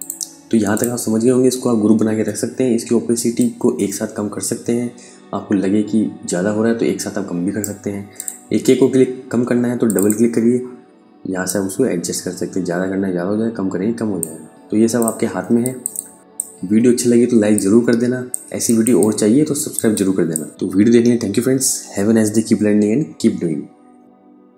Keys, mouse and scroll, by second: 0.2 shift+click, 1.6 ctrl+g, 2.8 click.